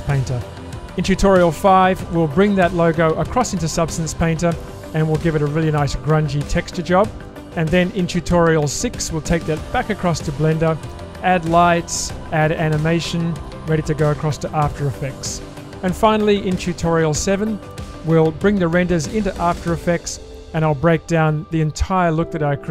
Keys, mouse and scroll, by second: 5.4 middle click, 6.6-8.0 middle drag.